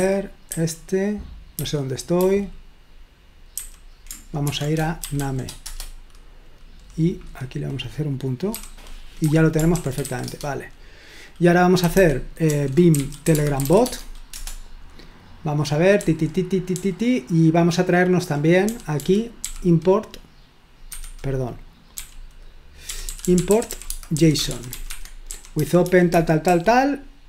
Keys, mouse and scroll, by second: 0.0-0.5 typing, 1.6-2.1 typing, 3.6-5.7 typing, 8.5 typing, 9.2 Escape, 9.7-10.2 typing, 11.6-14.1 typing, 14.3 Return, 16.0 typing, 17.4-20.0 typing, 21.1 Escape, 22.0-26.8 typing.